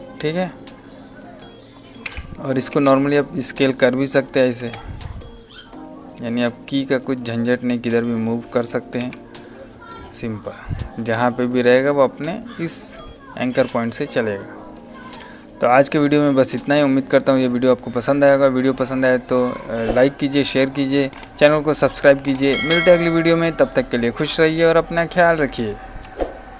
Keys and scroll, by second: 2.0 s, 4.5 space, 10.9 v, 25.9 space.